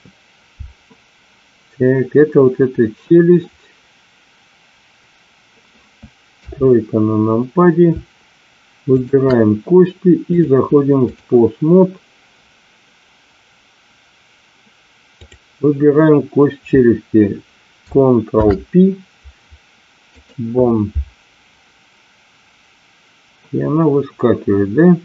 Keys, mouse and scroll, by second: 6.2 KP_3, 8.9 shift+click, 10.5 click, 18.2 ctrl+p.